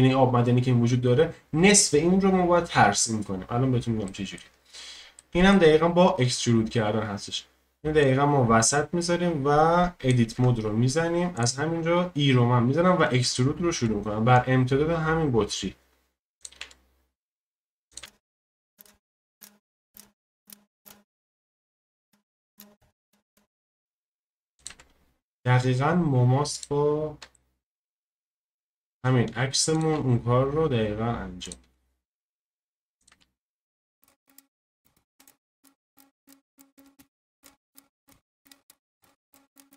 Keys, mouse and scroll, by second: 4.1 shift+middle click, 4.5-5.2 scroll up 1, 5.2 shift+middle click, 5.7-8.0 scroll up 3, 8.0 click, 10.3 Tab, 11.3-13.7 drag, 13.7 e, 16.6 e, 18.0 e, 18.9 e, 19.2-21.9 middle drag, 19.5 e, 23.8 middle click, 24.5-27.3 middle drag, 28.3-34.9 middle drag, 35.2-36.8 middle drag, 37.0-38.5 middle drag, 38.7-39.7 middle drag.